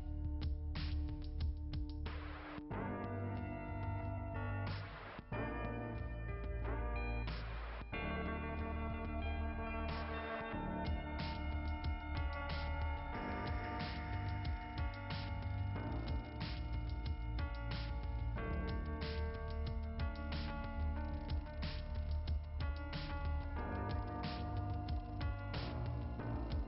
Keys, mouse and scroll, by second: 26.2 Return, 26.2 ,.